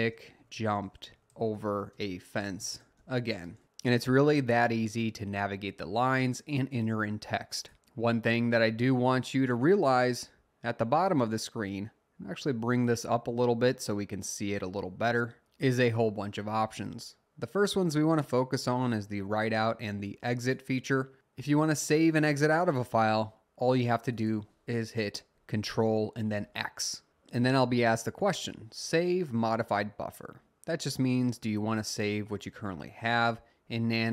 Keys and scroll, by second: 0.0-3.9 typing, 26.4 ctrl+x.